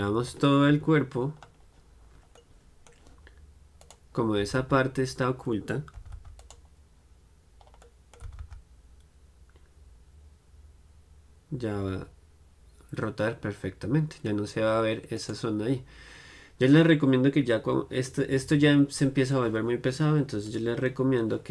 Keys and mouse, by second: 0.8 KP_Divide, 1.5-3.9 middle drag, 3.9-6.0 right drag, 7.4-9.1 right drag, 7.9-16.4 middle drag, 16.4-20.6 right drag, 20.6-21.5 drag.